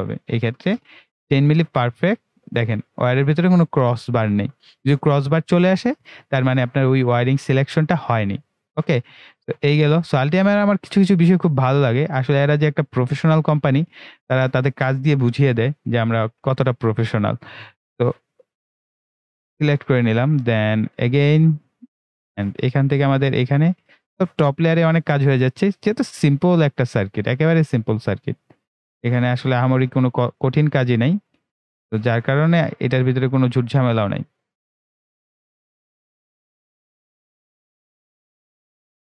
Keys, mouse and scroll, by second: 2.3 click, 7.9-10.6 right drag, 10.6-16.2 right drag, 16.2 ctrl+w, 17.7 click, 32.2-32.6 scroll up 1, 32.6-32.9 scroll down 1, 33.1-33.4 ctrl+scroll up 1, 34.4 ctrl+right click, 35.3-39.1 drag.